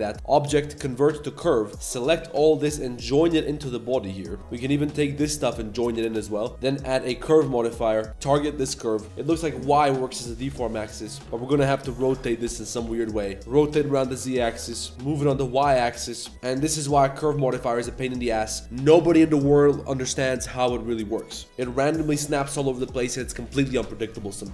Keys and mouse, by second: 0.1-1.2 drag, 1.9 shift+click, 3.7 ctrl+j, 4.3 shift+click, 4.4 g, 4.4 z, 4.6 z, 5.0 z, 5.2 shift+click, 6.5-7.2 drag, 6.5 a, 6.5 g, 8.1 ctrl+s, 9.0 KP_1, 10.4 g, 11.2 r, 12.6 g, 13.4 r, 14.6 KP_3, 14.9 g, 16.3 g, 18.2 shift+drag, 21.4 g.